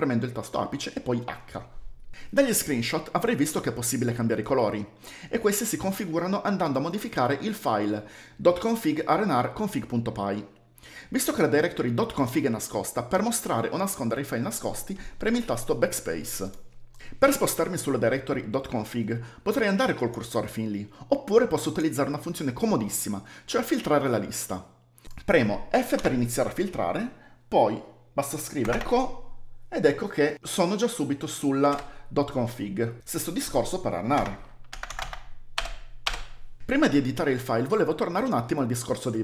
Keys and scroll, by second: 26.0 typing, 28.5-29.3 typing, 34.2-35.5 typing.